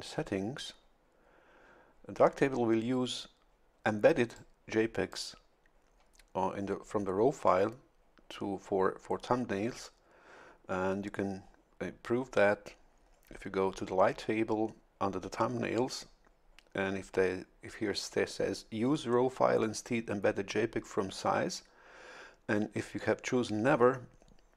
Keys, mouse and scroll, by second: 4.3-5.4 drag.